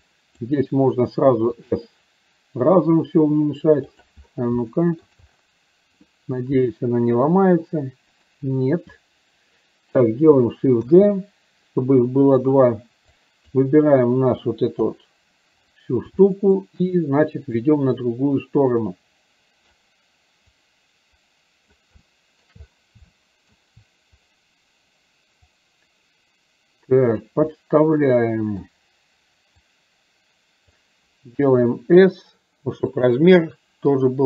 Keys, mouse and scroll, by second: 0.0 click, 4.6 shift+middle click, 11.0 shift+d, 13.4 drag, 16.4 shift+middle drag, 17.8-19.9 drag, 20.8-21.9 drag, 22.1-22.5 shift+middle drag, 23.1 shift+middle click, 25.6-27.4 drag, 27.6-28.8 middle drag, 29.8-30.9 drag, 34.1 click.